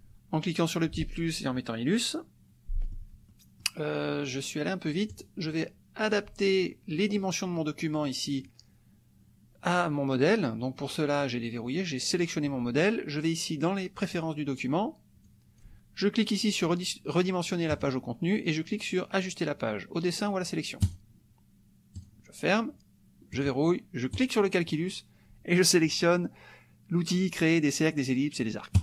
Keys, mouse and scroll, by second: 2.8 click, 3.3 click, 5.1 click, 6.1 click, 12.1 click, 15.3 click, 17.7 click, 20.8 click, 22.0 click, 23.3 click, 24.1 click.